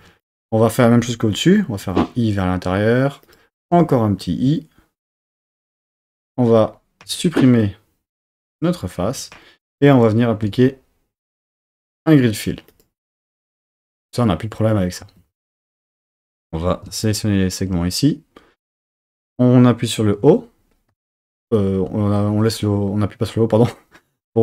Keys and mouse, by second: 0.0 3, 0.2 click, 2.0 i, 3.3 click, 3.8 i, 5.8 click, 7.0 x, 9.1 2, 11.4-13.0 drag, 13.4 Tab, 15.0 Tab, 15.7 2, 16.4 click, 20.0 o, 20.9 o.